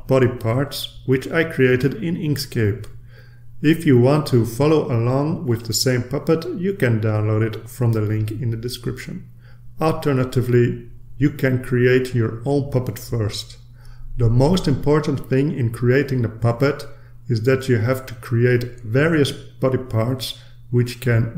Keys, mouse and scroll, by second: 1.9 ctrl+z, 2.3 ctrl+z, 4.9 click, 12.9 click, 14.8-17.9 drag, 19.0-21.3 drag.